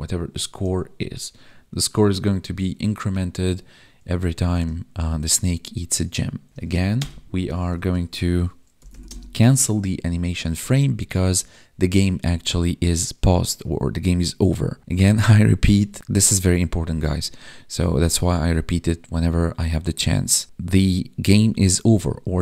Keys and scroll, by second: 6.5 ctrl+Down, 9.0 space.